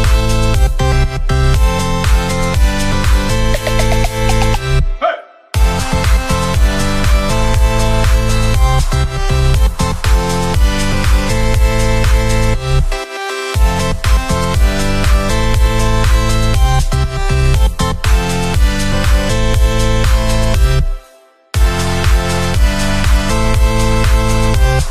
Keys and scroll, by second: 16.6 Right, 23.7 Up.